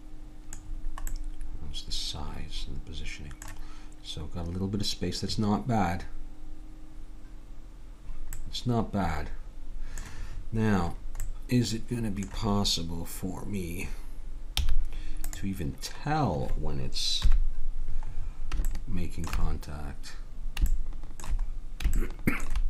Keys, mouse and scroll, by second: 1.2 middle click, 8.4 middle click, 9.3 click, 14.6 z, 17.2 KP_3, 20.8 click.